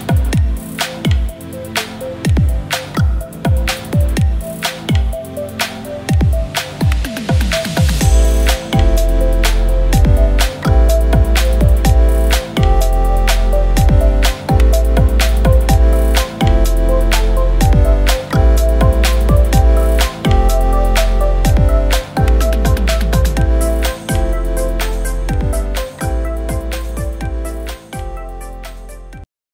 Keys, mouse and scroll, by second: 1.4 space, 1.4 click, 1.9 alt+scroll up 2, 5.4 shift+Up, 5.9 shift+Up, 6.4 shift+Up, 8.1 alt+middle click, 8.4 space, 8.4-9.7 drag, 10.5 space, 10.5 click, 14.9 shift+click.